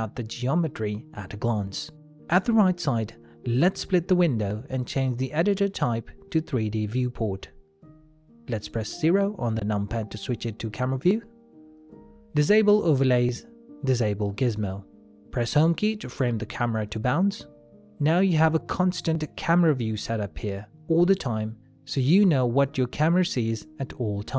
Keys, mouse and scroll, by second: 2.3 ctrl+middle click, 2.7 shift+middle click, 3.4 middle click, 5.4 click, 10.6 KP_0, 11.8 middle click, 13.6 click, 17.9 Home, 20.1 click.